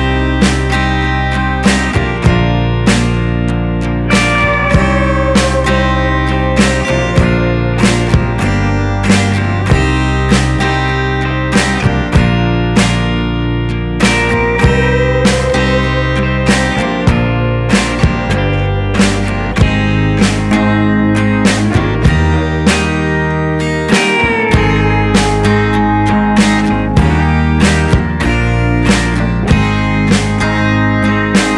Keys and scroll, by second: 17.3 Down, 21.4 Up, 24.9 Up.